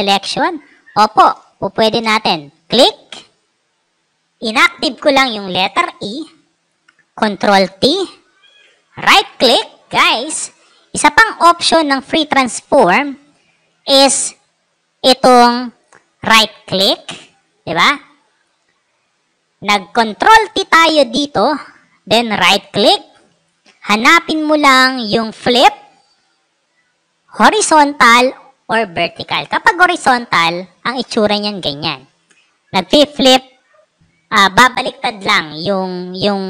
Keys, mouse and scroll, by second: 1.1 space, 1.3-1.8 drag, 2.4 click, 7.2 ctrl+t, 8.3 right click, 17.7 click, 22.0 right click, 29.7 click.